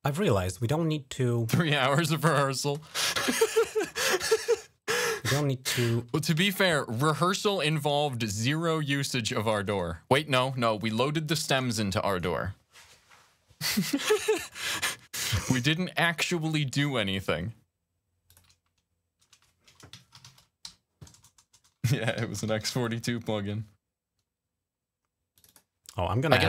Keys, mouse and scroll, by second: 0.0 click, 0.4 click, 2.4 click, 3.5 click, 3.9 alt+click, 5.7 f, 7.2 click, 7.5 click, 9.5 right click, 11.2 click, 14.3 click, 18.1 click, 19.7-22.7 typing, 25.1 click, 26.0 click.